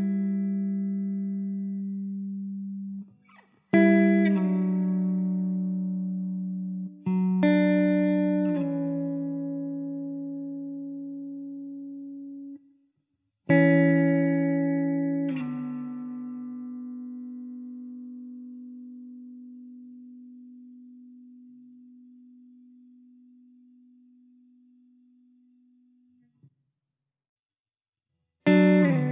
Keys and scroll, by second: 1.9 ctrl+j, 8.5 ctrl+z, 10.5 ctrl+z, 16.0 `, 20.3 KP_0, 24.4 KP_0.